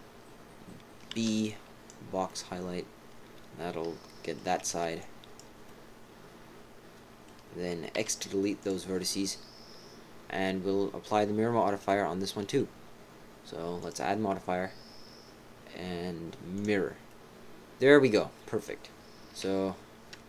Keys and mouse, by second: 1.2 b, 4.3 click, 4.6 b, 5.4 b, 5.6 click, 6.3 click, 6.5 click, 7.0 click, 7.9 x, 9.0 click, 9.6 click, 10.1 click, 10.6 x, 10.7 click, 12.5 right click, 13.8-16.6 drag, 19.4 KP_1.